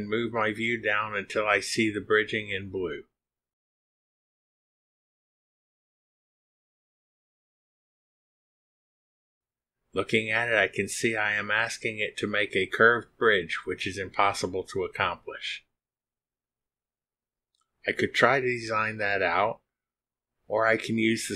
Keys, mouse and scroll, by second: 2.6 click, 3.7 scroll up 2, 4.5-8.1 scroll down 27, 8.5 click, 8.9 click, 9.3 click, 9.6-10.6 scroll down 7, 11.3 click, 11.7 scroll up 1, 11.9-15.7 middle drag.